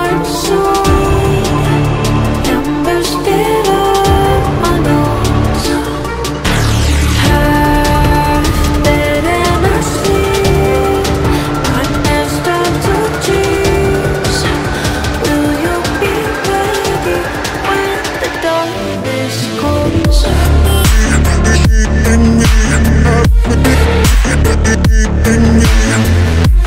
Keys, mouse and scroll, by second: 0.0 alt+scroll up 1, 1.5 BackSpace, 2.3 BackSpace, 2.4 ctrl+t, 5.3 right click, 8.9 ctrl+t, 9.1 ctrl+right click, 11.0 right click, 13.4 right click, 14.7 right click, 17.3 right click, 23.2 right click, 24.9 ctrl+t.